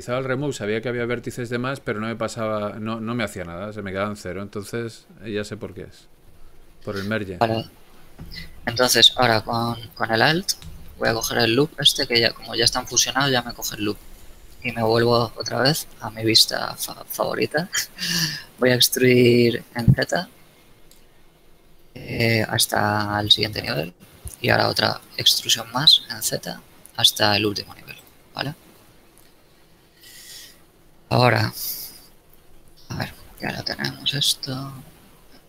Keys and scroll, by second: 19.7 z, 25.0 e, 26.7 z, 29.2 a.